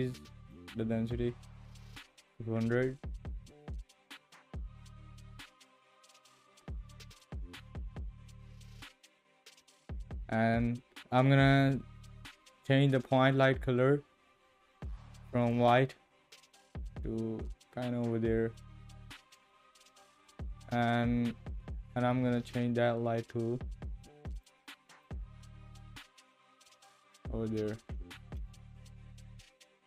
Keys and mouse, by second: 2.2 KP_0, 7.1 click, 22.4 click.